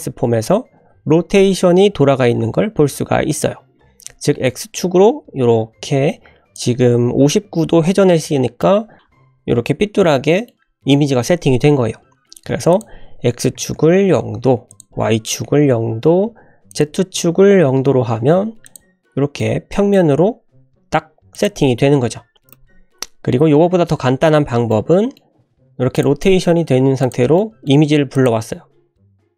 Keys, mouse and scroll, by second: 4.4-6.5 drag, 8.6-10.4 middle drag, 12.7-14.3 drag, 14.6-16.3 drag, 16.6-18.2 drag, 18.6 click, 19.3-19.9 middle drag, 19.9 scroll down 2, 20.5 `, 20.8 scroll up 2, 21.3 drag, 22.0 g, 23.0-23.7 scroll down 3, 23.7-24.3 scroll up 3, 24.6-25.1 middle drag, 25.4 r, 26.2 middle drag, 26.5 r, 27.3-27.6 middle drag, 28.1 click, 28.5-28.8 scroll up 2, 28.9 shift+middle drag.